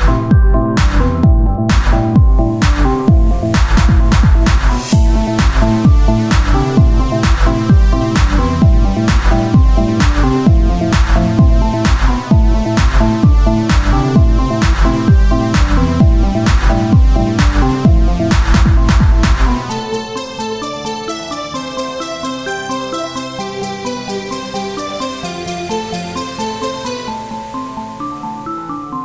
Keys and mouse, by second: 0.1-1.3 drag, 1.6 z, 2.3 KP_Divide, 2.8 z, 4.1 ctrl+Tab, 4.7 click, 6.9 click, 7.3 Tab, 7.7 KP_Divide, 8.2 z, 22.7 KP_1, 28.2 Tab, 28.7 KP_1.